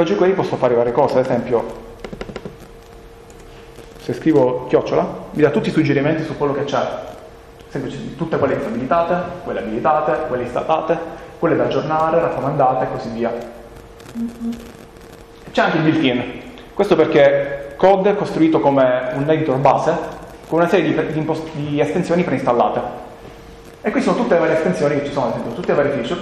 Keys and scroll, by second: 3.3 BackSpace, 7.2 Down, 8.9 Down, 9.8 Down, 11.1 Down, 12.0 Down, 14.4 Up, 14.9 Up, 15.1 Up, 15.4 Up, 17.2 Return.